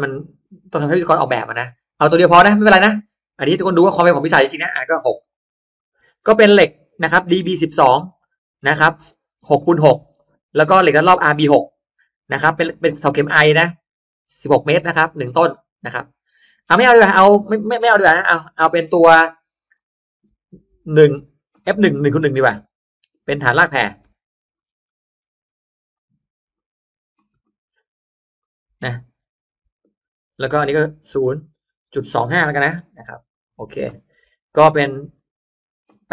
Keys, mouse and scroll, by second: 1.0-1.4 scroll up 1, 3.4 click, 3.9 click, 5.0 6, 5.1 click, 5.6 click, 5.8 6, 6.1 click, 17.0 click, 18.2 0, 18.5 click, 19.6 click, 21.0 1, 21.7 click, 22.4 click, 23.0 click, 23.3 1, 24.6 ctrl+z, 25.5 Escape, 25.8 click, 26.4 click, 27.2 1, 27.3 click, 28.3 click, 29.4 1, 29.7 click, 30.2 click, 32.5 2, 32.9 5, 33.2 click, 35.0 click.